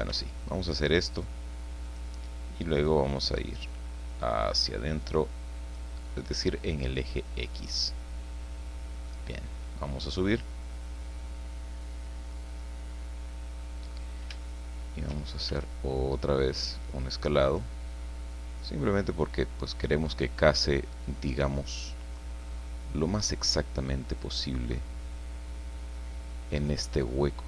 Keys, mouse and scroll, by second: 0.1 s, 1.9 click, 2.8-5.9 drag, 7.1-9.2 middle drag, 10.0-12.5 drag, 12.6-13.8 middle drag, 13.8-14.3 scroll up 1, 14.4 shift+middle click, 15.4 shift+s, 17.4 click, 18.3-20.2 drag, 21.0-22.3 drag, 22.4 middle click, 24.6-26.8 drag, 26.9-27.4 middle drag.